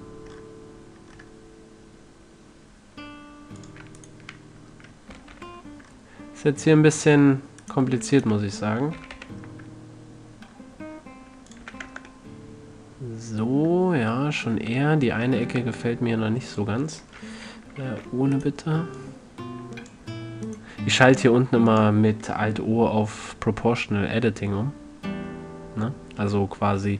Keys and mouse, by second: 4.0 click, 4.3-5.8 middle drag, 5.4 g, 5.8 click, 8.0-8.9 drag, 9.3 g, 12.0 a, 12.2 Tab, 14.6-15.6 middle drag, 14.9 Tab, 15.8 ctrl+Tab, 18.2 alt+o, 18.7-20.8 drag, 19.3-20.6 right drag, 20.8-22.0 right drag, 22.0-23.7 middle drag, 23.7-26.8 drag.